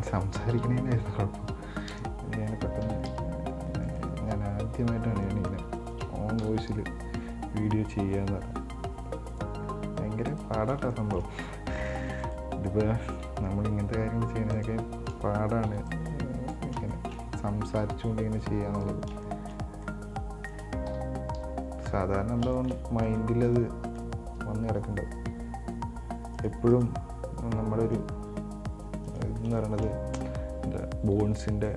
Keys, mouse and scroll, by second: 0.0 right click, 0.8 KP_1, 2.2 KP_Enter, 3.1 KP_1, 3.3 KP_3, 4.1 right click, 5.5 middle click, 6.0 shift+right click, 6.7 KP_1, 7.0 KP_3, 8.5 g, 10.8-11.2 scroll down 1, 11.2 shift+middle click, 11.6-12.0 scroll up 3, 12.0 right click, 12.4 right click, 13.5 g, 15.9 b, 17.1 shift+middle click, 17.9 g, 19.3 scroll down 4, 19.4 shift+middle click, 19.8 scroll up 1, 20.0-21.2 middle drag, 21.2 KP_1, 22.4-22.8 scroll up 3, 22.8 shift+middle click, 23.3 right click, 23.7 right click, 24.1 right click, 25.5 g, 27.0 right click, 28.0 right click, 28.5 g, 29.6 scroll down 3, 29.8 shift+middle click, 30.2-31.3 scroll up 3, 31.4 b.